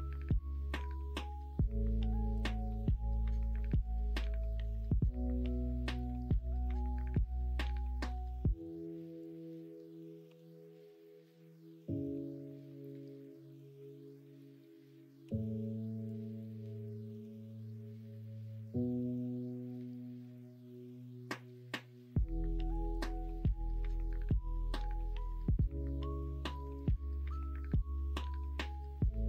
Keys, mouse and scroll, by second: 8.0 1, 12.1 2, 15.2 o, 18.3-22.7 drag, 22.9 ctrl+z.